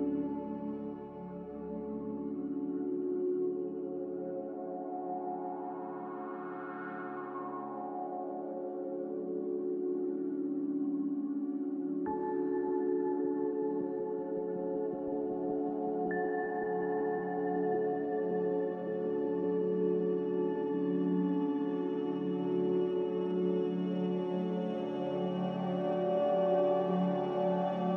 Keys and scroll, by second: 6.9 a, 10.2 z, 12.5 a, 20.1 z, 22.6-25.1 typing.